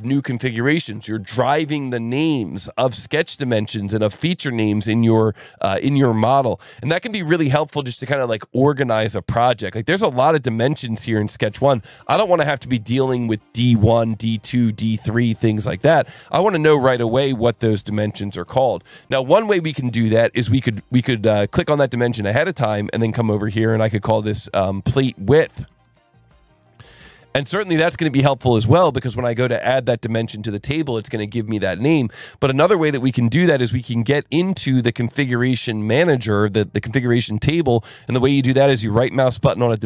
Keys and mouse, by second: 6.5 alt+1, 9.3 click, 16.6 click, 17.1 click, 21.5 click, 23.3 click, 24.2-28.1 typing, 29.3 click, 33.7 click, 38.8 right click.